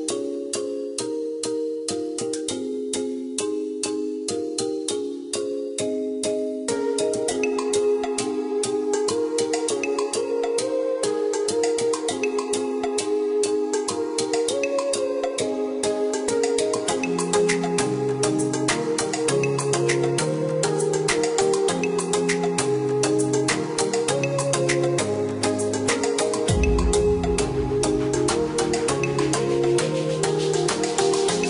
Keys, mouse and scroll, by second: 0.1 click, 0.6 click, 1.1-2.0 scroll up 1, 2.0-3.7 scroll down 1, 3.7 click, 5.7 click, 7.9 click, 8.3 Escape, 9.3 click, 10.5 click, 11.1 click, 11.9 KP_3, 12.1 KP_2, 12.3 Return, 14.0 click, 17.5 click, 20.1 click, 20.9 KP_1, 21.2 KP_5, 21.5 KP_Enter, 22.2 Escape, 24.1 ctrl+click, 25.7 ctrl+click, 27.8 click.